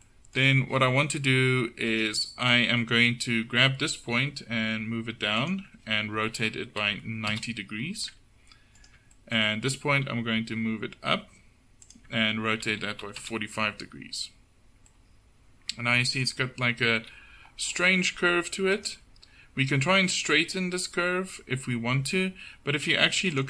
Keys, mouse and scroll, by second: 2.7-4.1 drag, 4.1 g, 6.3 r, 9.2-10.8 drag, 10.0 g, 12.7 r, 17.0 KP_7, 19.5 Tab.